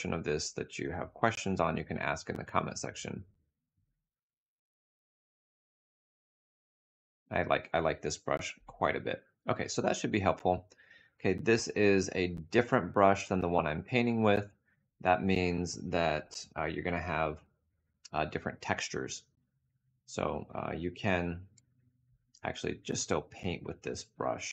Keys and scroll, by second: 21.1 b.